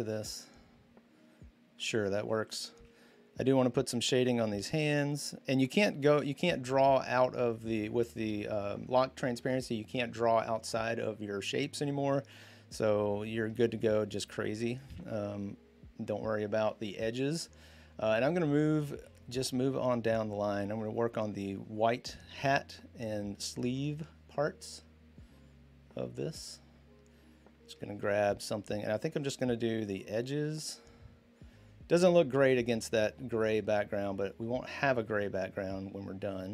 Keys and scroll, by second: 14.7 ctrl+z.